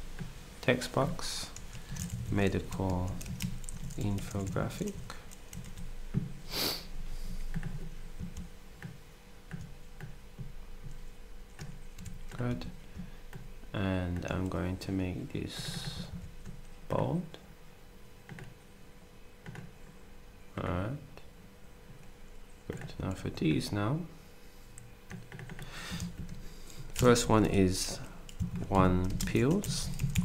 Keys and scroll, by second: 1.6-5.6 typing, 11.9 d, 12.4 s, 16.1 ctrl+a, 23.1 ctrl+d, 26.0 ctrl+a, 27.2-29.0 typing.